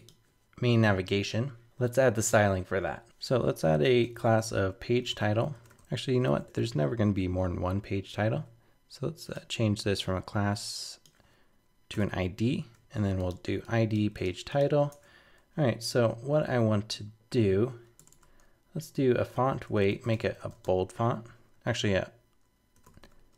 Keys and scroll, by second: 8.3 super+s.